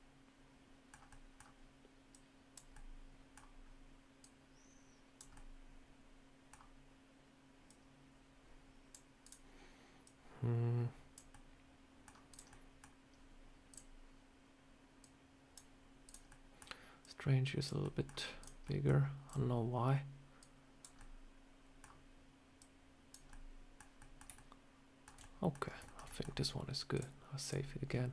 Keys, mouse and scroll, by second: 1.0 middle click, 2.0 click, 2.6 middle click, 4.1 click, 5.2 middle click, 7.5 click, 9.1 click, 9.9 click, 11.2 middle click, 12.2 click, 12.4 middle click, 13.6 click, 14.9 click, 15.9 click, 16.1 middle click, 16.9 click, 17.7 middle click, 18.2 click, 18.5 middle click, 19.1 click, 20.2 click, 20.8 middle click, 22.4 click, 23.1 middle click, 23.8 middle click, 24.2 shift+middle click, 24.3 shift+middle click, 25.1 middle click, 25.5 scroll down 3, 25.7 shift+middle click, 25.9 middle click, 26.8 click.